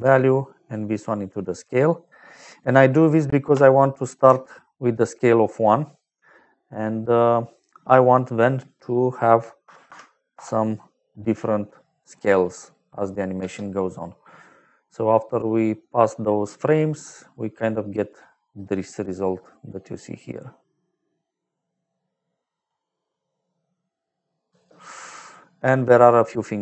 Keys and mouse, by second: 0.1 click, 1.1 click, 3.4 shift+click, 5.4 middle click, 8.6 click, 9.5 KP_1, 9.8 KP_2, 10.2 Return, 13.3 space, 20.5 middle click, 24.4 space, 24.9 middle click.